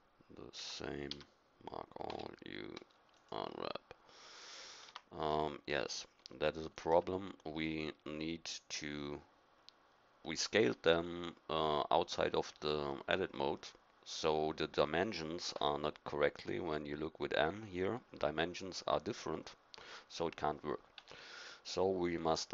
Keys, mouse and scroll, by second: 0.5 Tab, 1.0 a, 2.0 u, 4.8 Tab, 10.1-12.3 drag, 15.5 n, 20.9 n.